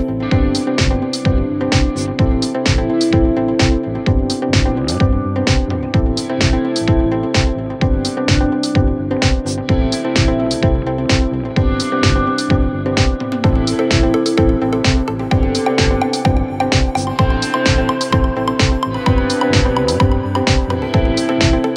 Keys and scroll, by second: 5.1 ctrl+z, 7.8 c, 12.1 F3, 12.4 Escape, 19.4 Escape.